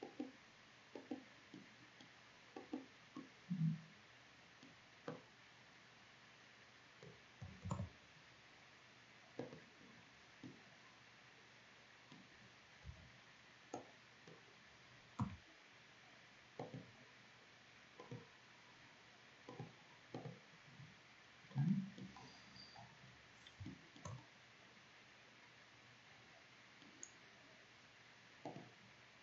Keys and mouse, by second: 3.9 middle click, 4.7-6.7 drag, 7.3 ctrl+z, 12.5 b, 14.8 w, 20.4 middle click, 21.3 middle click, 23.3-24.3 middle drag, 25.8-28.1 middle drag.